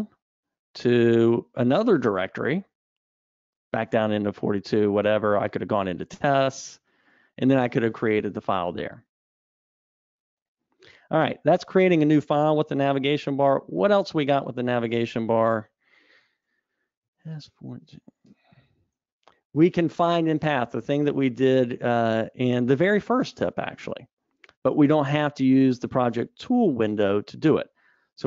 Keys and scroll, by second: 10.1 Escape, 12.9 super+Down, 14.6 super+Up.